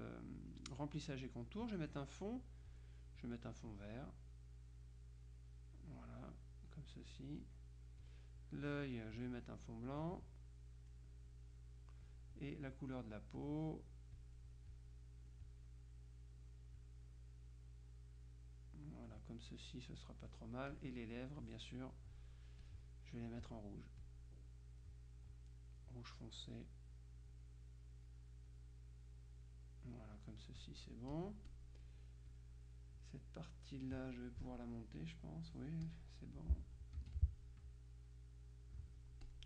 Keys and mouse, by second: 1.7 click, 2.8 click, 3.8 click, 8.1 click, 9.2 click, 10.0-11.5 drag, 12.4 click, 13.5 click, 14.2 click, 15.6 click, 16.9 click, 20.8-22.0 drag, 22.7 click, 23.5 click, 25.4 click, 26.2 click, 27.4 click, 28.6 click, 30.7 click, 31.6 click, 32.4 click, 35.1 click, 37.0 F2, 37.2-39.4 drag.